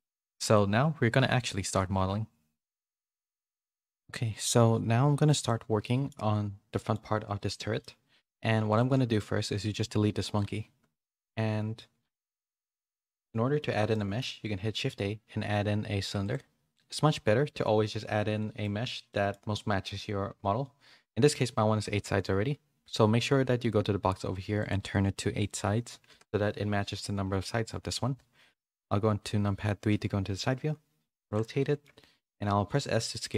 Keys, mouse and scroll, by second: 1.4 click, 6.8 middle click, 7.7 middle click, 8.6 click, 12.3 middle click, 12.7 middle click, 13.2 middle click, 14.1 middle click, 14.7 shift+a, 19.1 middle click, 24.5-26.1 drag, 28.9 KP_3, 29.9 r, 31.5 shift+middle click, 31.7 shift+scroll down 1, 31.8 shift+middle click, 32.2 s.